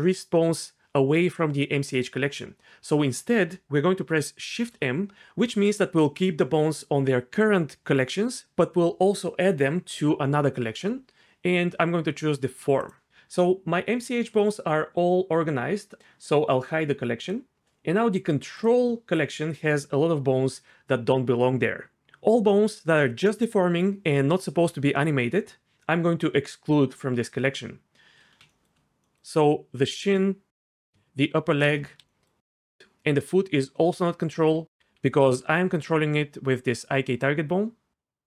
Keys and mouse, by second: 4.5 shift+m, 17.2 click, 18.6 click, 30.7 shift+click, 34.8 d, 34.9-37.8 d.